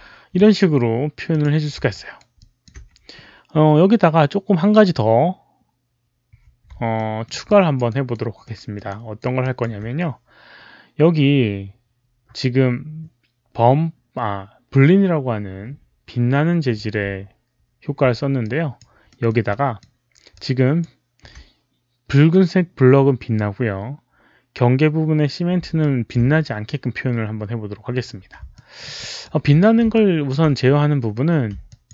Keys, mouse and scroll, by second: 1.2 alt+click, 1.9 alt+right click, 2.3 alt+click, 5.6 alt+click, 5.6 alt+right click, 6.8 alt+middle click, 7.4 alt+click, 7.8 alt+right click, 8.2 alt+click, 8.3 alt+middle click, 8.5 alt+click, 8.8 alt+right click, 9.3 alt+click, 13.1 alt+click, 13.1 alt+right click, 13.1 alt+middle click, 14.8 alt+click, 14.8 alt+right click, 18.3 alt+click, 18.4 alt+right click, 18.4 alt+middle click, 19.0 alt+middle click, 19.4 alt+click, 20.2 alt+click, 25.7 alt+click, 28.4 alt+middle drag, 28.9 alt+click, 29.9 alt+click, 31.1 alt+middle click, 31.6 alt+click.